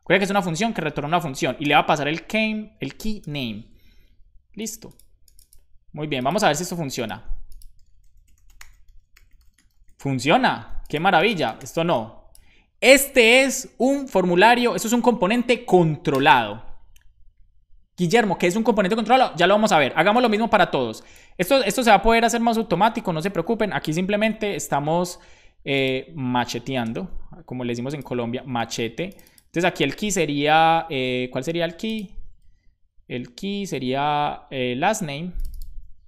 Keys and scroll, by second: 0.0-2.9 typing, 3.8 super+s, 23.3 super+c, 24.2 super+Left, 26.6 super+v, 26.9 space, 28.6 super+v, 28.6 space, 32.4 super+Right, 33.6 super+Left.